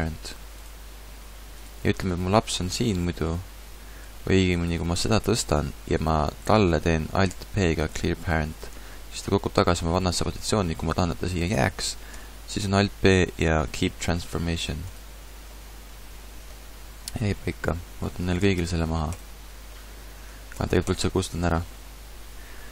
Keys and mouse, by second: 1.5-4.1 drag, 2.2 g, 4.5 ctrl+z, 4.9 g, 7.3 alt+p, 10.7 ctrl+z, 12.1 alt+p, 17.2 a, 17.5 a, 18.4 alt+p, 20.5 x.